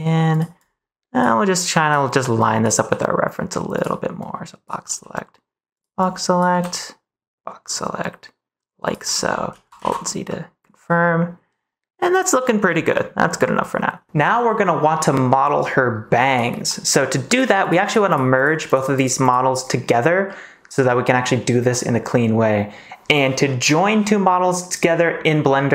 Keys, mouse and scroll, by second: 0.6 click, 1.5 click, 2.4 click, 2.7 g, 3.7 click, 4.2 click, 4.8 g, 5.7 click, 6.0 click, 6.4 g, 8.8 click, 9.7 alt+z, 10.2 scroll up 1, 10.3-12.5 middle drag, 12.9 middle click, 14.0 ctrl+s, 16.6 middle click, 17.2 click, 17.6 click, 18.7 click, 20.2-22.1 middle drag.